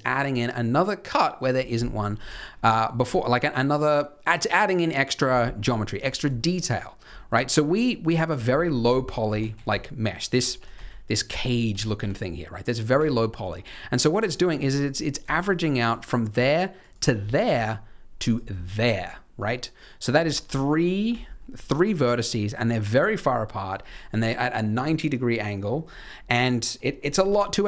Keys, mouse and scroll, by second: 2.0-2.5 scroll down 2, 2.2 Tab, 2.5 scroll up 3, 5.4-6.0 scroll down 2, 6.0 scroll up 1, 6.3 shift+middle click, 6.7-7.0 scroll down 1, 7.1 shift+middle click, 7.7 click, 9.2-12.9 typing, 12.7 scroll down 1, 13.4 scroll up 1, 13.9 click, 14.3-14.8 scroll up 1, 14.8 click, 15.3 shift+middle click, 16.7 shift+click, 17.2 shift+middle click, 18.2 shift+click, 18.6 shift+middle click, 19.1 middle click, 20.1-20.4 scroll down 2, 20.4 z, 21.3 middle click, 22.1 middle click, 25.9-26.3 scroll up 2, 26.3 middle click, 27.3 middle click, 27.6 scroll down 1.